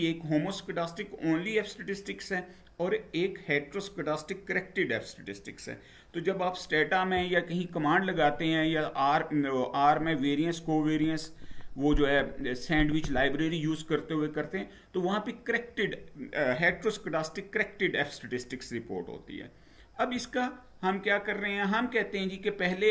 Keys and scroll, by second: 20.0 Down.